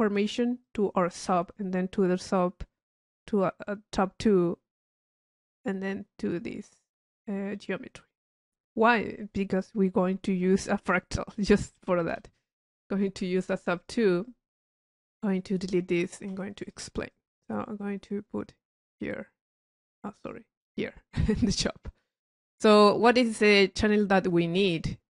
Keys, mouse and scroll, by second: 0.6 click, 2.2 click, 7.5 right click, 10.8 click, 11.8 c, 13.2 click, 14.2 click, 15.3 click, 16.0 click, 16.6 click, 17.1-18.7 drag, 20.2-21.2 drag, 21.8 middle click, 22.2 click, 24.7 click.